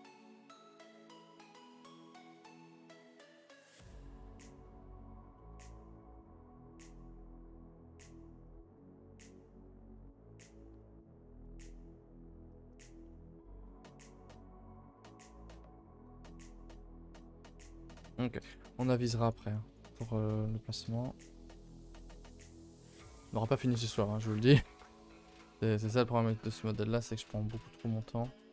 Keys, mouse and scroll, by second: 1.3-1.7 scroll down 5, 1.7 middle click, 2.2 KP_0, 6.1 click, 9.8 middle click, 10.0 a, 10.2 b, 11.6 a, 11.8 scroll down 2, 12.1 ctrl+s, 12.2-12.7 scroll up 3, 15.6 middle drag, 15.9-16.2 scroll up 4, 16.2-17.7 middle drag, 17.7-18.1 scroll up 2, 18.1-18.8 middle drag, 18.8-19.1 scroll up 1, 19.1 middle click, 19.3 scroll down 1, 19.5 middle click, 19.7-20.0 scroll up 5, 20.0-20.7 middle drag, 20.7 click, 20.9 middle drag, 21.3 a, 21.9-23.0 middle drag, 23.0-23.4 middle drag, 23.4 scroll down 2, 23.6 a, 23.7 a, 24.2 ctrl+s, 24.4 middle drag, 24.5 middle click, 24.7 scroll down 1, 24.9-25.4 middle drag, 25.4 click, 28.2 shift+click.